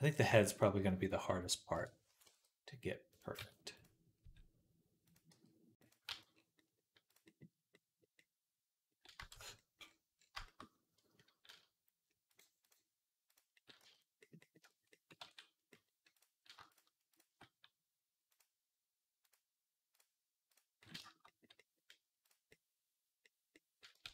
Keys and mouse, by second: 0.1 b, 1.2 ., 2.1 g, 4.0 Tab, 4.0 s, 5.9 g, 5.9 z, 6.1 middle click, 7.5 click, 8.0 click, 8.3 click, 9.0-10.0 shift+drag, 9.2 shift+c, 10.0 shift+middle click, 10.5-12.1 middle drag, 12.1-13.3 drag, 13.3-16.0 middle drag, 13.6 z, 15.1 ctrl+s, 16.0 click, 16.4-18.2 shift+middle drag, 18.2 click, 18.3 middle click, 19.1-20.4 drag, 20.4-22.1 middle drag, 22.1 click, 22.2-24.1 middle drag, 23.9 ctrl+s.